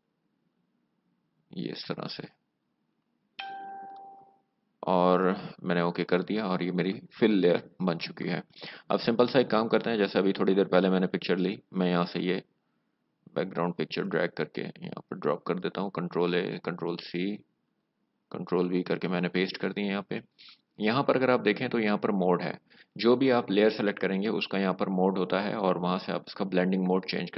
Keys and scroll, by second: 16.2 ctrl+a, 16.8 ctrl+c, 18.5 ctrl+v.